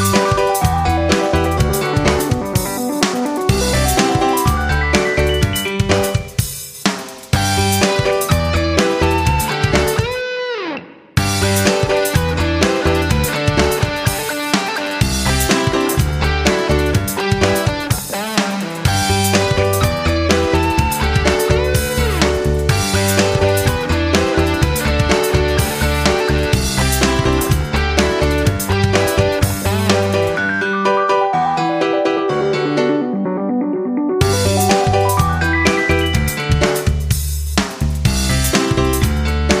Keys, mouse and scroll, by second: 1.3 shift+click, 9.0 F9, 10.0 click, 17.3 F9, 17.6 click, 25.3 Down, 25.6 Down, 25.7 Down, 26.2 Down, 28.0 click, 29.2 F9, 30.6 click, 35.6 F9, 37.0-39.6 drag.